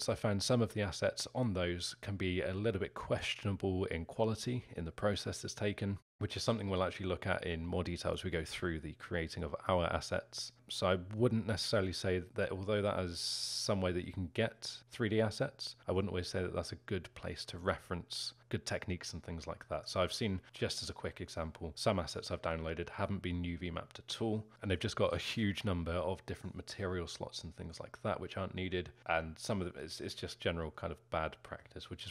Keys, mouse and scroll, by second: 30.7-31.1 scroll down 2, 31.1-31.6 scroll up 2, 31.6-32.1 alt+middle drag.